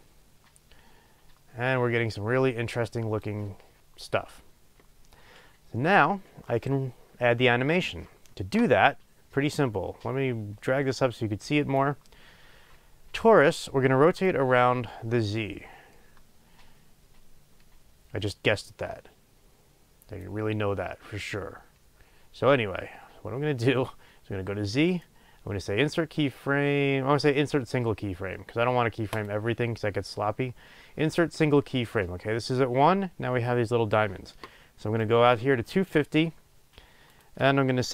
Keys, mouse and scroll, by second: 29.3-37.9 right drag.